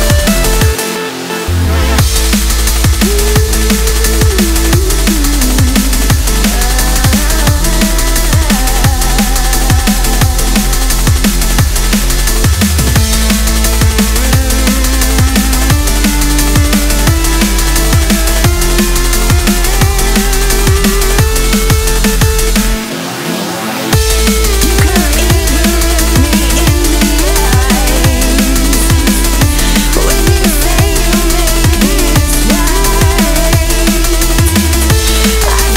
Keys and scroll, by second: 2.7 ctrl+z.